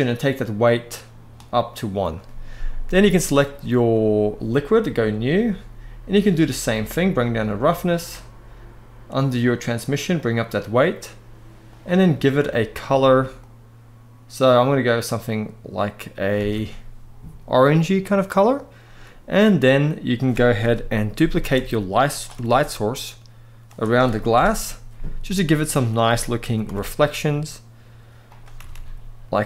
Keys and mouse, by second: 4.7 drag, 6.6 click, 9.2 drag, 9.9 click, 11.4 click, 16.1 alt+a, 20.3 KP_7, 21.1 shift+d, 21.8 click, 22.1 r, 24.0 KP_0, 26.1 g, 26.3 y, 28.3 r, 28.4 r.